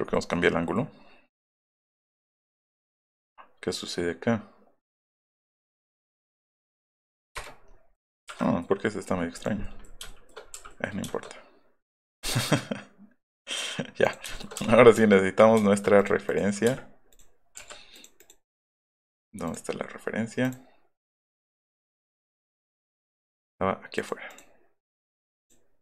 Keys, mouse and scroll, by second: 2.6 click, 7.3 Return, 7.4-7.7 scroll up 1, 9.5 middle click, 10.0 shift+middle click, 12.1 click, 14.0 click, 14.3 shift+middle click, 14.5 scroll up 2, 14.5 space, 15.4 scroll up 3, 15.5 shift+middle click, 15.9 click, 16.2 click, 16.6 space, 17.1 click, 17.9 click, 18.1 click, 18.4 right click, 23.7 click, 25.4 click.